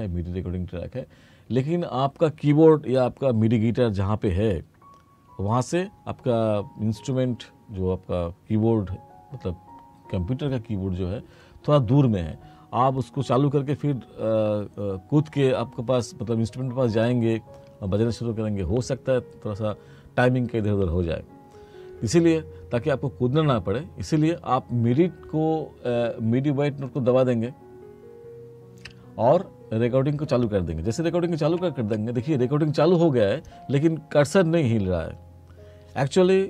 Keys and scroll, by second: 31.7 3.